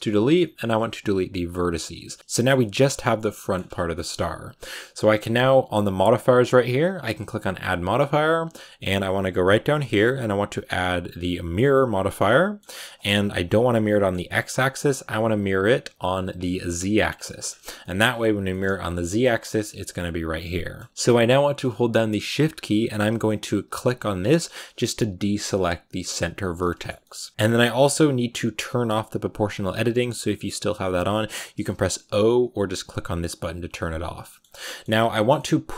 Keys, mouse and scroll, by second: 1.4 x, 1.9 z, 2.1 scroll up 1, 2.2-3.2 shift+middle drag, 3.2 scroll up 1, 3.4-11.8 middle drag, 12.1 middle click, 12.6 scroll down 1, 12.7-14.7 middle drag, 14.7 click, 15.9-17.1 drag, 17.1-18.5 middle drag, 18.5-19.8 scroll down 1, 19.8 scroll down 1, 19.9-20.9 middle drag, 20.9-23.7 scroll down 1, 23.7-25.8 shift+right drag, 25.8-26.3 scroll up 1, 26.3 scroll down 1, 26.5-32.7 middle drag, 32.7-34.1 drag, 34.1-35.6 middle drag, 35.6 g.